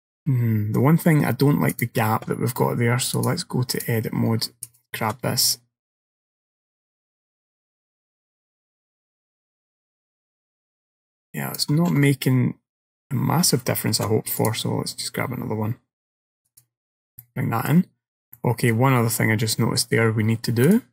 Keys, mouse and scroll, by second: 0.2-0.8 scroll down 1, 1.8 click, 3.5 click, 4.7 alt+click, 5.6 click, 12.0 ctrl+z, 14.0 ctrl+r, 17.0 scroll down 3, 17.3 middle click, 18.0-19.5 scroll down 5, 18.4 middle click, 19.5 middle click, 20.7 click.